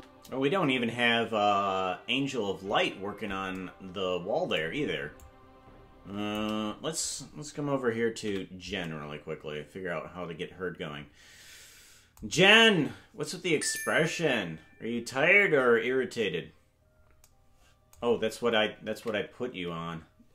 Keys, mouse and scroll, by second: 5.2-6.4 drag, 8.2 KP_Decimal, 18.9 ctrl+Tab.